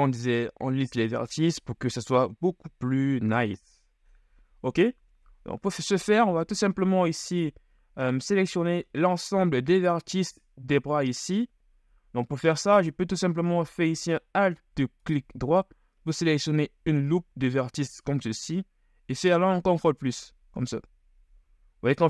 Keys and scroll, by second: 12.0 KP_1, 18.2 KP_1, 19.8 ctrl+KP_Add, 20.9 ctrl+KP_Add.